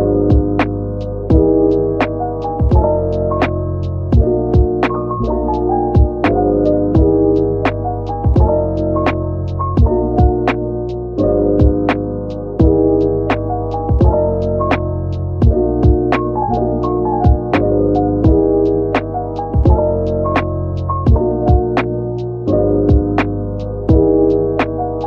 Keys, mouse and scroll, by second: 1.3 right click, 3.1 2, 3.9 middle click, 5.0 alt+click, 7.1 alt+shift+click, 7.5 alt+shift+middle click, 9.4 alt+shift+click, 10.6 alt+shift+click, 11.2 middle click, 12.1 alt+shift+click, 13.3 ctrl+b, 15.9 right click, 16.6 shift+click, 17.8 ctrl+b, 20.2-20.7 scroll up 1, 21.4 Tab, 21.9 middle click, 23.4 right click.